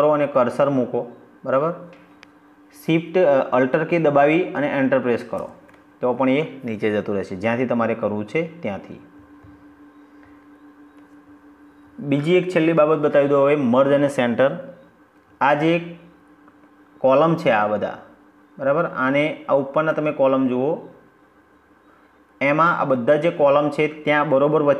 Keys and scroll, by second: 4.2 alt+Return.